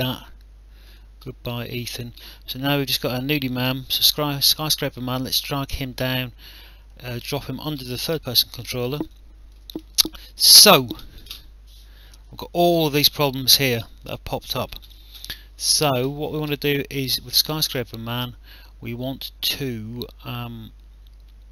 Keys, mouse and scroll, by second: 0.9 click, 4.0 click, 9.1 alt+click, 10.5 click, 16.9 click.